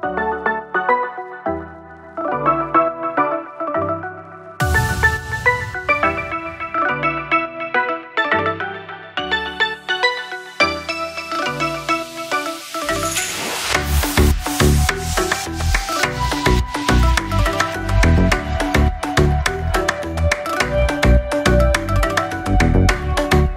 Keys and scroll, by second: 0.8 ctrl+[, 11.6 ctrl+[, 16.6 ctrl+0.